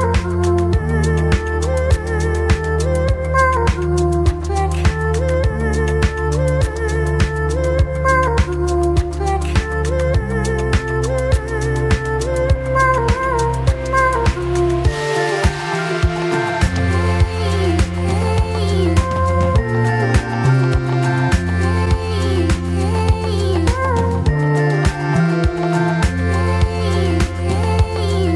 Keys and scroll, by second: 0.2 1, 1.0 ctrl+shift+e, 1.5 1, 2.7 F4, 3.3 F4, 4.1 F4, 5.5 F4, 6.6 1, 6.7 F4, 9.1 2, 9.6 ctrl+r, 9.9 ctrl+c, 11.8 Return, 11.8 0, 14.0 1, 15.1 ctrl+shift+e, 17.4 ctrl+shift+e, 18.7 2, 19.0 ctrl+r, 19.2 ctrl+c, 21.8 2, 22.2 F4, 23.2 F4, 25.6 2, 26.2 F4, 27.5 ctrl+r, 27.6 ctrl+c.